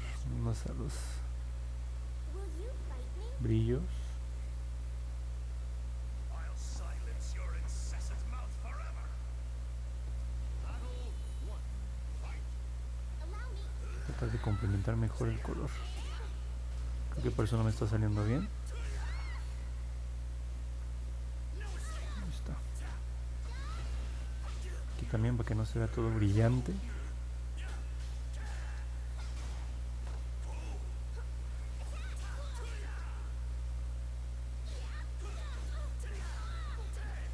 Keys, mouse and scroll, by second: 2.1 click, 11.7 click, 12.7 click, 14.6 click, 19.5 click, 20.0 click, 20.3 click, 20.7 click, 21.0 click, 21.3 click, 21.6 click, 22.6 click, 23.0 click, 24.5 click, 24.8 click, 25.0 click, 25.3 click, 25.9 click, 26.3 click, 26.6 click, 26.9 click, 27.4 click, 27.9 click, 29.0 click, 29.7 click, 30.0 click, 30.4 click, 30.8 click, 31.1 click, 31.4 click, 31.6 click, 32.0 click, 32.3 click, 32.7 click, 33.0 click, 34.5 click, 34.8 click, 35.2 click, 36.2 click, 36.5 click, 37.1 click.